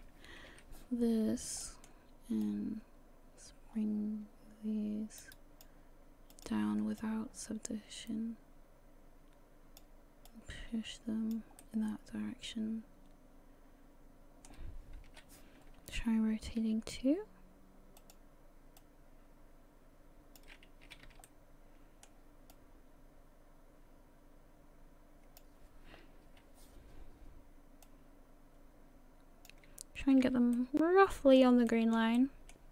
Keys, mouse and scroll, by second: 0.5 KP_3, 1.3 scroll up 2, 1.6 shift+middle click, 2.4 click, 6.3 click, 7.0 click, 10.3 click, 11.6 middle click, 15.1 KP_3, 16.6 r, 18.8 click, 20.9 a, 21.1 a, 21.2 middle click, 22.5 click, 26.3 KP_3, 27.8 click, 30.0 a, 30.2 a, 30.6 middle click, 31.7 shift+middle click, 32.1 middle click.